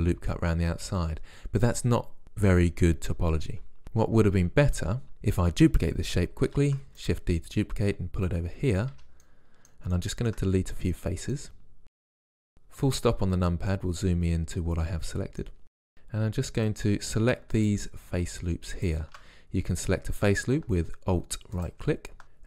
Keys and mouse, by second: 4.1 ctrl+z, 4.8 ctrl+z, 6.6 shift+d, 9.0 Tab, 12.1 KP_Decimal, 15.8 ctrl+Tab, 19.2-20.4 right drag, 20.4 click, 21.6-22.4 right drag.